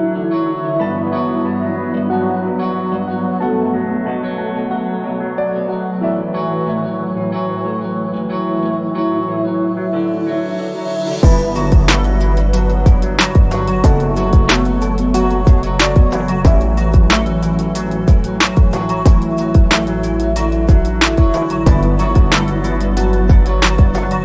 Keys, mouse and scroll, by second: 7.8 ctrl+z, 8.6 z, 9.3 click, 14.0-15.1 alt+scroll up 2, 15.2 ctrl+scroll down 1, 15.8 ctrl+alt+scroll down 1, 16.4 ctrl+alt+scroll up 1, 17.8 click.